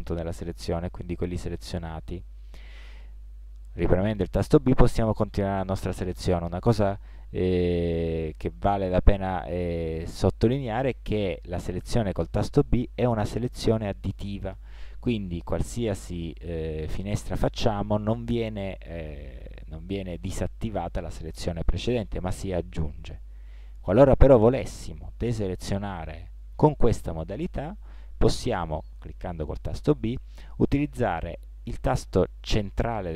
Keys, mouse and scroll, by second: 3.6 b, 11.3 b, 16.4 b, 29.1 b.